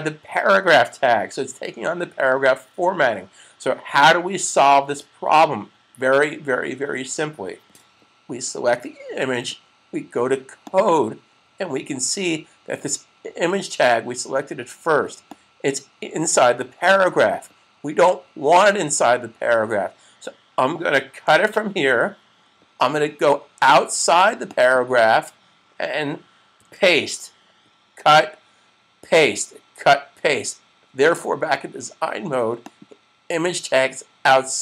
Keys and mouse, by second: 10.5 click, 15.1 click, 21.0 super+x, 24.3 click, 26.5 super+v, 32.5 click.